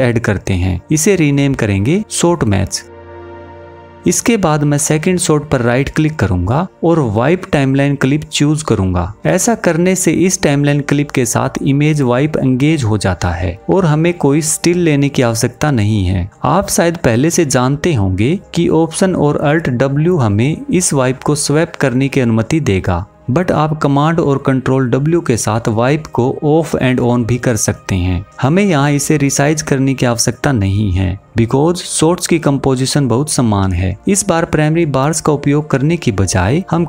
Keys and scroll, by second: 19.0 alt+w, 24.7 super+w.